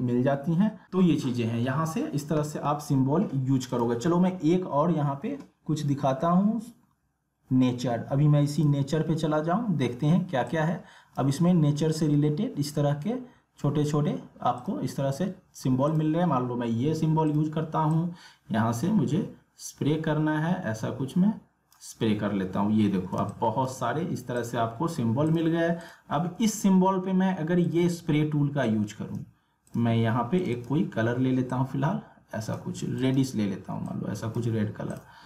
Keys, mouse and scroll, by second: 1.3 click, 3.7 click, 8.6-13.6 drag, 14.6-22.8 drag, 22.8 alt+scroll down 1, 23.2 space, 23.3-35.2 drag.